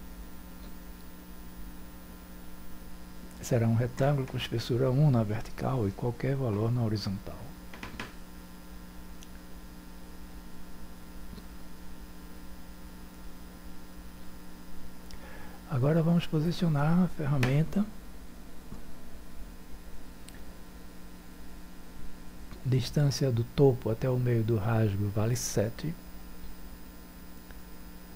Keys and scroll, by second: 11.3 1.